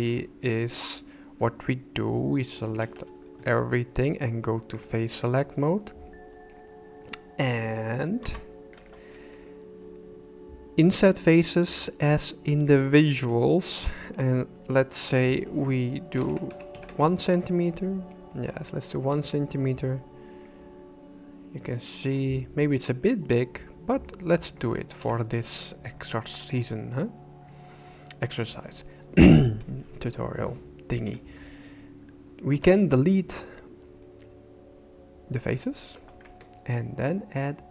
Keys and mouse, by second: 2.7 a, 4.8 click, 8.2 i, 12.7 click, 13.9-16.9 drag, 20.4-21.9 middle drag, 24.0 middle click, 25.0 KP_1, 26.1 shift+middle click, 32.5 x, 36.3 Tab, 37.4-37.7 drag.